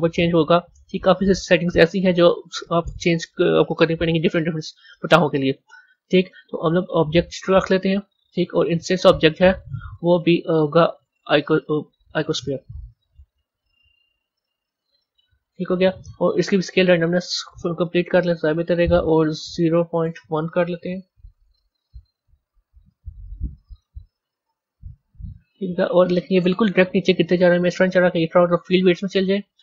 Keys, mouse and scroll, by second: 0.4 scroll down 4, 1.1 scroll down 1, 1.7 scroll down 3, 2.9 click, 3.8 scroll down 2, 4.9-7.9 drag, 8.8 click, 9.6-12.6 drag, 12.7 click, 13.2-16.2 drag, 16.4-21.1 drag, 21.7 click, 23.6 a, 24.7 a, 25.7 scroll down 5, 26.9 scroll down 5, 28.6 click.